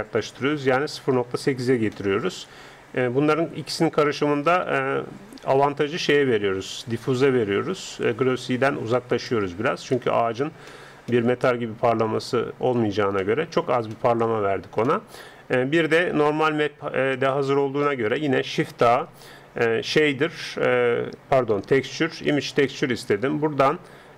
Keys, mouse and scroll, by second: 3.3-5.3 drag, 9.9-14.8 middle drag, 18.9 shift+a.